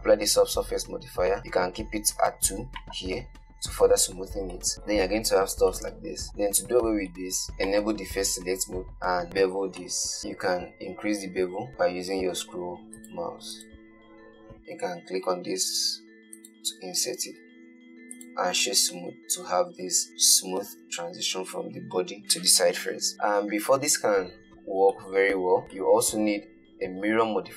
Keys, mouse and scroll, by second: 3.1-4.1 drag, 4.1-4.7 scroll up 4, 4.7 shift+right click, 4.7 shift+middle click, 5.0 Tab, 6.7 3, 7.5 middle click, 8.0 click, 8.6 ctrl+b, 14.6 click, 15.5 i, 17.5 Tab, 18.0 right click, 19.3 middle drag, 25.6 shift+middle click, 26.2 middle click.